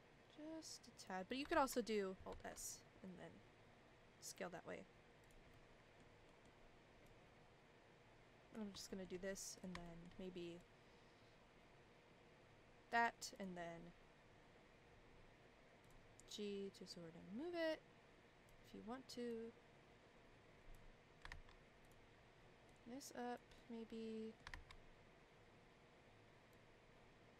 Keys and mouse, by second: 1.5 ctrl+z, 2.3 alt+s, 5.5 middle click, 6.2 middle click, 7.1-8.5 drag, 8.9 shift+middle click, 9.5 click, 9.8 shift+middle click, 10.6-12.9 drag, 15.8 click, 16.9-18.5 drag, 19.3-20.8 drag, 21.3 ctrl+z, 21.8 click, 22.7 click, 23.6 middle click, 24.5 ctrl+z, 26.5-27.3 drag.